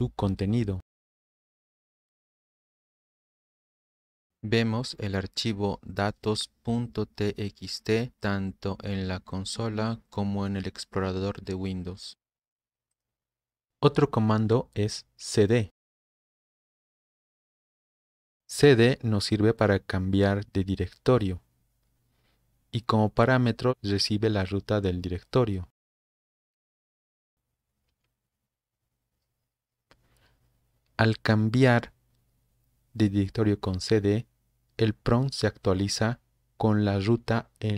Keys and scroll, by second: 2.0-3.5 typing, 4.0 Return, 4.9 Return, 13.7 Escape, 16.1-17.0 typing, 26.3-27.8 typing, 27.9 Return.